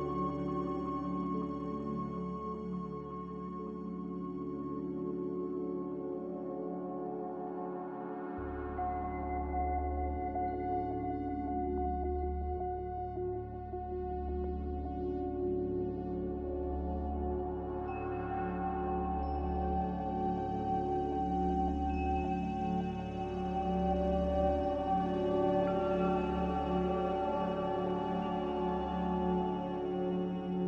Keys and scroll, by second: 20.7 g, 27.9 c.